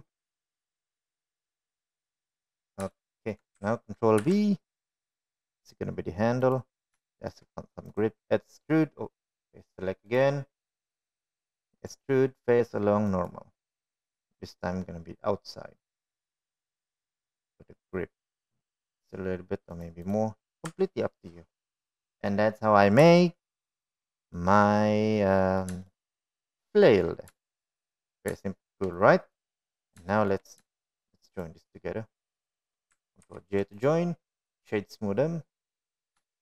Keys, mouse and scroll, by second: 0.6 shift+middle click, 1.7 ctrl+r, 5.2 shift+middle click, 6.5 ctrl+b, 9.3 shift+middle click, 10.2 right click, 12.4 click, 15.6-22.2 right drag, 23.1 Tab, 23.9-24.7 middle drag, 25.6-26.0 shift+middle drag, 26.7-27.9 middle drag, 28.3-28.6 shift+middle drag, 29.0-29.4 middle drag, 29.8 shift+middle drag, 31.8 click, 32.5 shift+middle click, 33.7 shift+click, 35.7 ctrl+j, 36.2 click.